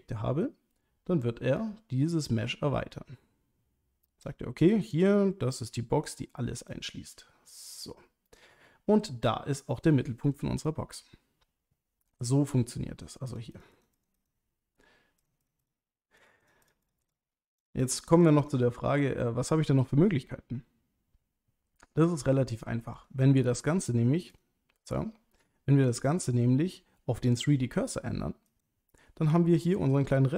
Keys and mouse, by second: 1.6-4.2 drag, 4.9-6.1 drag, 6.7-8.3 drag, 13.3 click, 13.5 click, 13.7 click, 13.9 click, 14.1 click, 15.2 click, 15.4 click, 15.6 click, 16.2 click, 16.4 click, 16.6 click, 16.8 click, 17.0 click, 17.6 click, 17.8 click, 18.0 click, 18.2 click, 18.4 click, 23.0-24.4 drag, 26.0-28.6 drag.